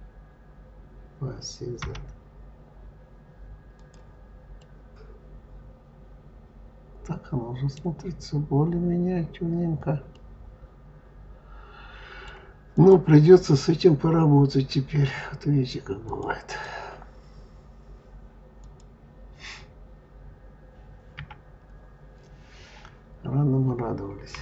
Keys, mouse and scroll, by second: 4.4-7.5 middle drag, 7.9-9.4 scroll up 7, 10.0-12.6 middle drag, 12.6 click, 15.9 click, 16.3 click, 18.5 click, 21.0 KP_Divide, 24.2 KP_3.